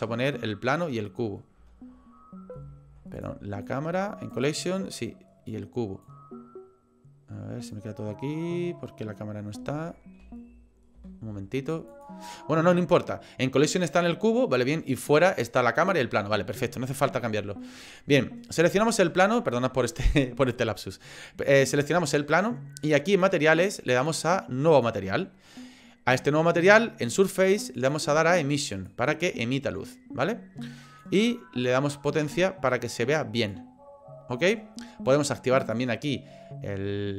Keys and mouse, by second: 2.6 ctrl+z, 3.1 click, 3.6 click, 4.8 click, 6.0-7.7 drag, 9.9 ctrl+z, 10.2 ctrl+z, 11.0 ctrl+z, 11.9 click, 18.5 click, 23.2 click, 24.7 click, 27.9-28.9 drag, 31.0-33.6 drag, 35.7 click.